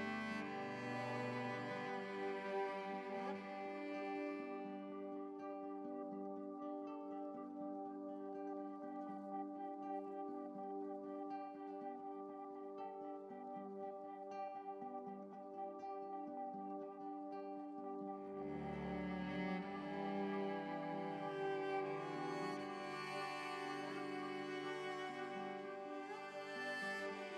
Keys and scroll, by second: 22.8 ctrl+z.